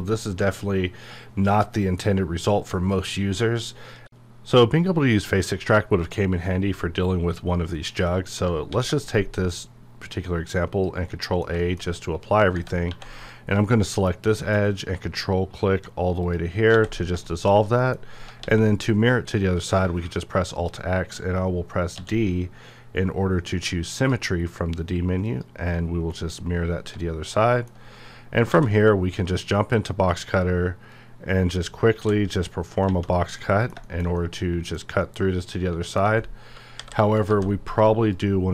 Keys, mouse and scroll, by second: 0.1 click, 0.4-2.5 middle drag, 2.5-3.1 scroll up 1, 3.1 middle click, 8.4 shift+middle click, 8.6 ctrl+a, 9.4-11.1 drag, 11.1 middle click, 11.8 scroll up 1, 12.5 Tab, 13.1 click, 13.6 shift+middle click, 14.6 shift+scroll up 1, 16.2 ctrl+click, 16.7 ctrl+x, 17.0 scroll down 1, 17.2 shift+scroll up 1, 17.5 shift+scroll down 2, 17.8 middle click, 18.0 scroll up 1, 19.3 middle click, 22.0 d, 23.9 click, 26.5 scroll down 1, 26.9-28.4 middle drag, 28.4 alt+w, 29.7 click, 30.1 scroll up 1, 30.9 click, 32.0 g, 33.4-36.7 middle drag, 36.8 KP_5, 37.3 ctrl+z, 38.1 click.